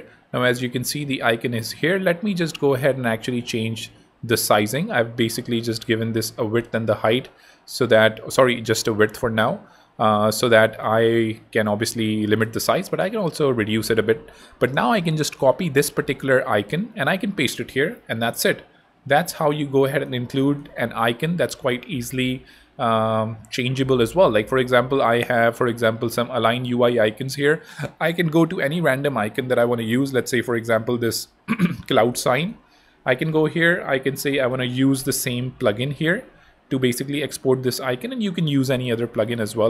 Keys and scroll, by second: 11.3 BackSpace, 14.3 Home, 14.7 super+c, 17.1 super+v, 20.9 BackSpace, 21.6 super+BackSpace, 21.7 super+Tab, 33.4 super+p, 34.1-35.0 typing, 35.8 Return.